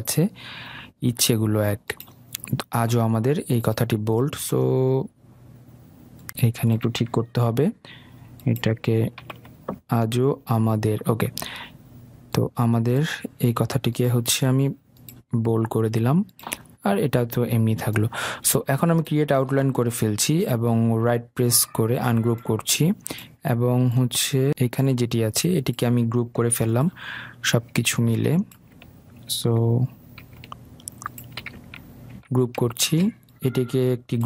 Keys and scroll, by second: 7.8 ctrl+x, 9.5 ctrl+v, 32.4 ctrl+g.